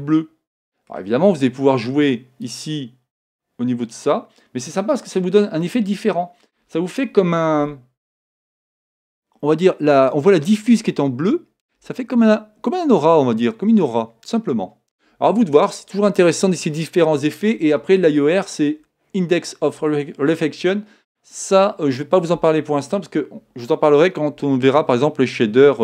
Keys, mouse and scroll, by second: 2.5-4.4 drag, 5.6-7.6 middle drag.